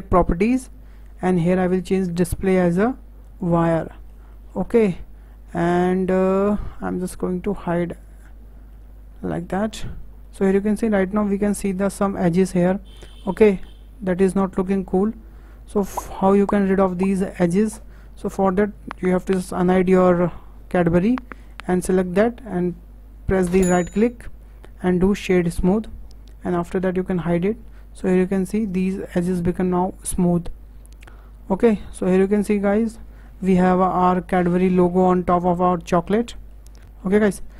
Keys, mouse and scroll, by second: 2.1-3.9 drag, 3.9-4.7 shift+middle drag, 4.7-5.8 scroll up 6, 5.8-6.4 scroll down 4, 6.4-8.1 shift+middle drag, 8.1 click, 8.7 middle click, 9.7-10.2 scroll up 5, 10.2-13.3 shift+middle drag, 15.3-15.7 scroll down 5, 15.8 shift+middle click, 16.5-16.8 scroll up 2, 16.8-20.1 shift+middle drag, 20.1 click, 21.4 click, 23.8-26.9 right drag, 27.1 click, 27.9-28.5 scroll up 4, 28.5-31.2 scroll down 1, 31.2-31.7 scroll down 7, 31.7-33.0 middle drag, 33.0-33.8 scroll down 5, 33.3 shift+middle drag, 33.8-36.0 middle drag, 36.0-36.3 scroll up 2, 36.3-36.8 shift+middle drag, 36.8 scroll up 2, 37.0-37.3 shift+middle drag, 37.3-37.5 scroll down 4.